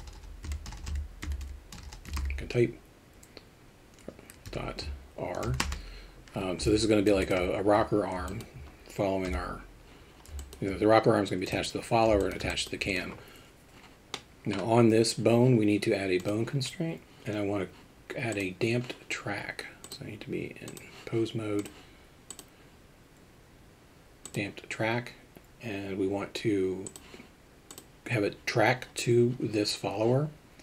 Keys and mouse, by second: 0.8 BackSpace, 1.8 BackSpace, 6.8 alt+middle drag, 7.2 shift+middle click, 8.2 alt+middle click, 9.3 KP_Divide, 10.4 alt+middle drag, 11.4 alt+middle click, 12.2 alt+shift+middle click, 12.5 alt+middle drag, 14.1 middle click, 16.2 click, 18.3 click, 19.8 click, 21.6 click, 22.3-24.3 drag, 26.9 click.